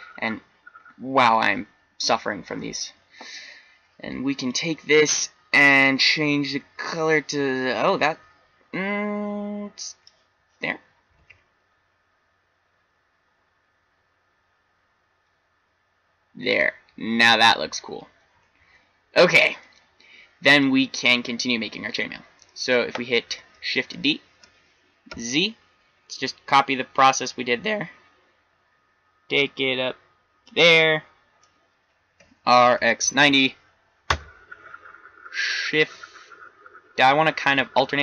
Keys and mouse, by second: 4.3-6.4 drag, 12.0 shift+z, 18.6 shift+z, 21.0 middle click, 21.1 middle click, 24.4 shift+d, 32.1 r.